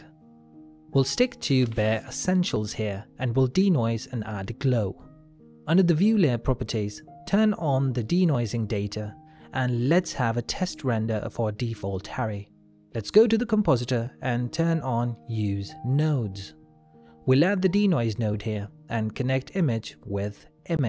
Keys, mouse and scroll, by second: 3.2 click, 3.6 ctrl+middle click, 4.5 shift+middle click, 7.7 click.